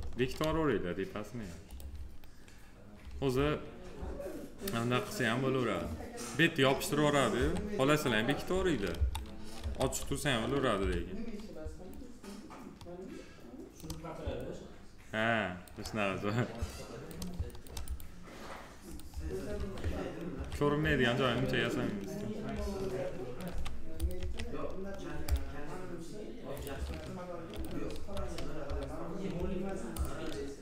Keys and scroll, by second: 7.1 3, 19.3 1, 22.3 s, 27.7 F4.